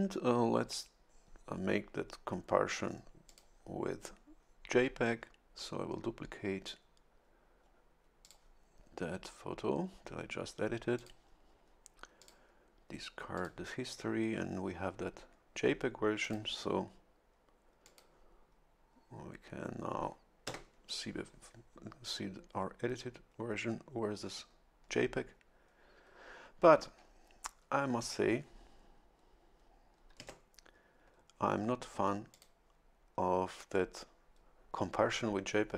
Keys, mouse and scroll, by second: 3.3 click, 8.2 click, 10.9 click, 12.2 click, 13.3 click, 16.2 click, 17.8 click, 20.5 Tab, 30.2 Tab, 32.3 click.